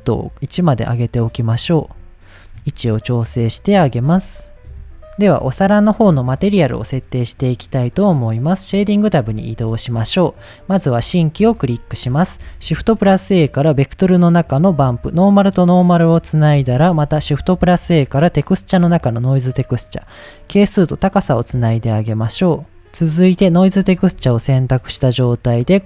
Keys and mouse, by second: 0.2 click, 2.6 g, 2.7 z, 3.9 click, 4.7 KP_1, 6.3 click, 7.5 click, 8.6 middle click, 9.4 shift+middle click, 10.6 click, 11.7 middle click, 12.6 shift+a, 15.2-15.9 drag, 16.2 middle click, 16.8 shift+a, 20.1-21.0 drag, 21.7 middle click, 24.0 ctrl+t, 24.6 middle click.